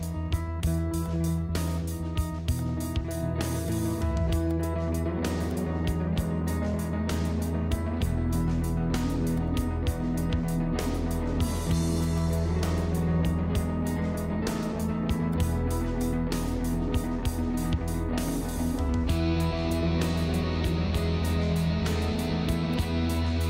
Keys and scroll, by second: 0.5 ctrl+z, 6.5 space, 8.3 ctrl+0.